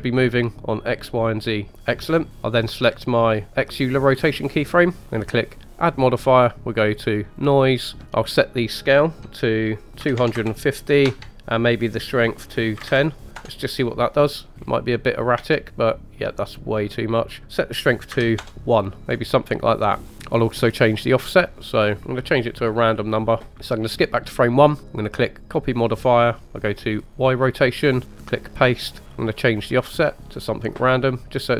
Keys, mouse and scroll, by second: 4.4 click, 5.8-7.5 drag, 8.2-13.6 drag, 14.6-15.4 scroll down 2, 15.4 space, 17.2-18.6 drag, 19.1 scroll up 1, 19.9 scroll down 2, 20.1 ctrl+z, 21.2-23.5 drag, 23.5 space, 23.9 click, 25.4 click, 27.1 click, 28.2 click, 30.2-31.5 drag.